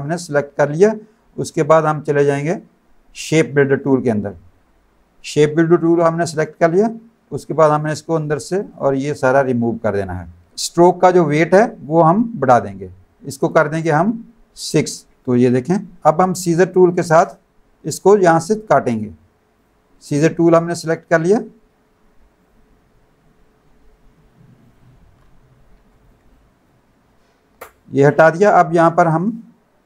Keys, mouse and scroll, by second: 3.8 click, 7.5 click, 8.6 click, 11.9 click, 13.4 click, 14.7 KP_6, 15.1 Return, 15.2 click, 19.5 click, 22.4 click, 24.6 click, 26.3 click, 28.1 click.